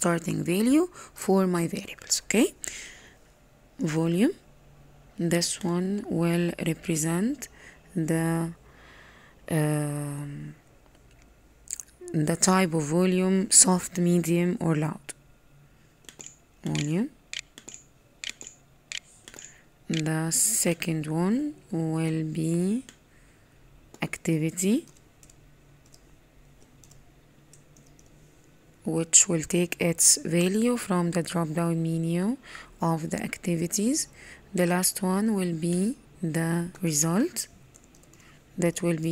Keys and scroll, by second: 18.9-19.8 typing.